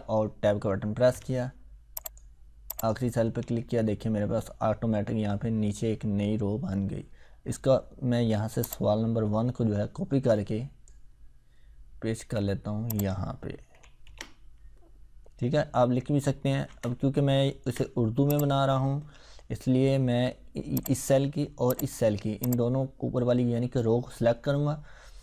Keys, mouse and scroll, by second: 1.1 Tab, 2.0 click, 3.1 Tab, 8.7-11.1 drag, 12.1 ctrl+x, 12.9 click, 16.5 ctrl+z, 18.3 click, 20.8-23.9 drag.